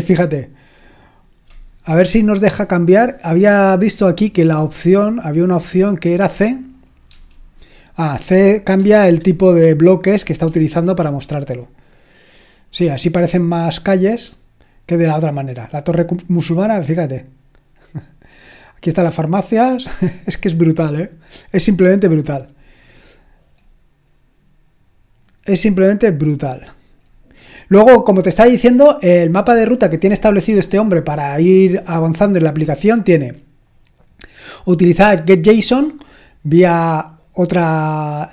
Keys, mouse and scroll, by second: 1.5-2.9 scroll down 1, 2.9-4.5 scroll up 2, 4.5-5.8 scroll up 1, 5.8-6.7 scroll down 1, 6.7 click, 7.1 typing, 8.2-8.7 typing, 10.7-11.5 ctrl+scroll up 1, 11.5-12.8 ctrl+scroll up 1, 16.7 click, 18.2 click, 20.8-23.6 scroll down 3, 23.6-24.3 scroll up 2, 24.3-25.5 scroll up 1, 25.5-27.0 scroll up 1, 27.0-27.4 scroll down 2, 27.4-28.7 scroll up 3, 28.7-32.6 scroll down 2, 32.6-36.1 scroll down 1, 36.3-38.2 scroll down 2, 38.2-38.3 scroll up 2.